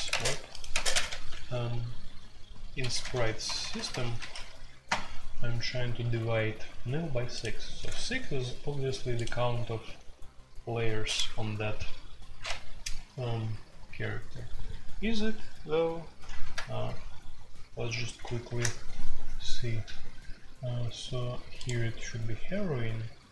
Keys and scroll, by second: 0.1-1.0 typing, 0.1 Tab, 2.8-4.8 typing, 16.4 super+r, 16.7 typing, 17.9 typing, 18.4 Return.